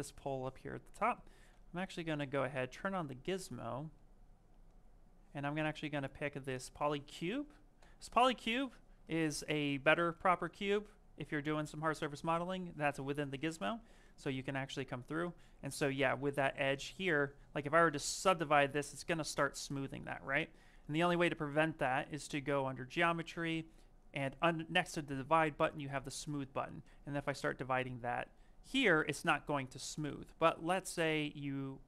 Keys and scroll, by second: 1.8 q, 13.4 q, 15.8 z, 17.7 ctrl+d, 29.6 shift+f, 30.5 ctrl+z, 30.8 ctrl+z, 31.3 ctrl+z.